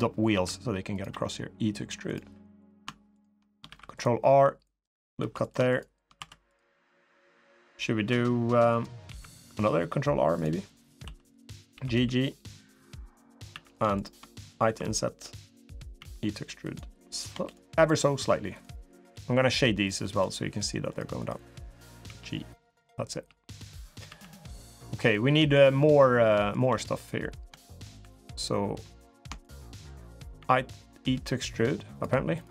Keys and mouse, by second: 0.1 i, 0.9 e, 3.4 ctrl+r, 4.9 3, 5.2 click, 5.9 2, 6.2 click, 7.8 2, 8.8 ctrl+r, 10.8 2, 11.5 g, 13.3 3, 13.7 shift+click, 14.4 i, 15.7 e, 17.2 shift+click, 18.3 shift+click, 19.6-20.8 shift+drag, 21.8 g, 23.0 g, 23.8 3, 24.9 middle click, 25.0 click, 26.1 shift+click, 27.4 shift+click, 27.7 3, 29.2 shift+click, 30.1 e, 32.1 click.